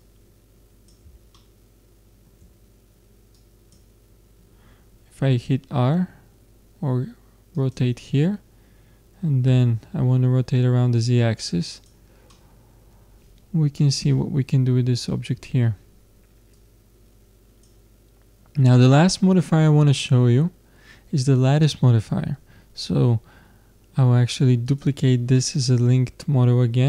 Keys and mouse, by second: 1.5-3.3 middle drag, 3.4-5.0 drag, 7.6-9.4 drag, 13.4 middle click, 13.6 middle click, 14.1-15.4 middle drag, 16.6-18.2 drag, 21.1-23.3 middle drag, 24.7-26.3 drag.